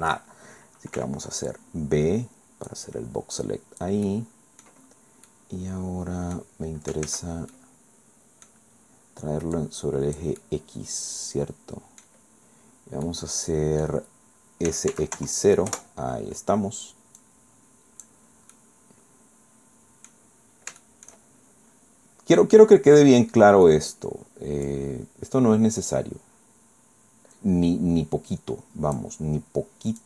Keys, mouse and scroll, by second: 1.0 b, 1.5-2.9 drag, 3.4 click, 4.1 click, 4.8-5.2 scroll down 1, 5.3-6.6 drag, 6.6 scroll up 1, 7.0 ctrl+z, 7.5-8.6 ctrl+drag, 8.6-9.0 scroll down 2, 9.0 middle click, 9.6 click, 10.4 middle click, 10.4-12.2 drag, 13.0-14.0 drag, 14.7 s, 14.9 x, 15.2 KP_0, 15.7 KP_Enter, 17.2-18.2 drag, 18.5 scroll down 2, 18.6-20.3 drag, 20.4-20.7 scroll up 2, 20.8 shift+click, 23.0 click, 24.7-29.2 drag, 29.9 click.